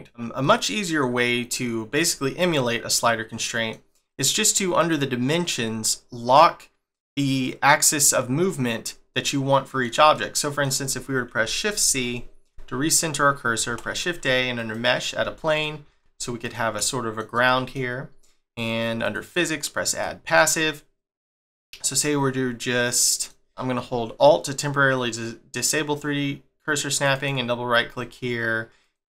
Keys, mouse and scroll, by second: 4.3 click, 4.8 click, 9.1 middle click, 11.9 shift+c, 13.7 shift+a, 15.2 s, 16.9 shift+middle click, 18.6 click, 19.0 click, 19.9 click, 20.6 middle click, 21.5 middle click, 26.9 alt+right click.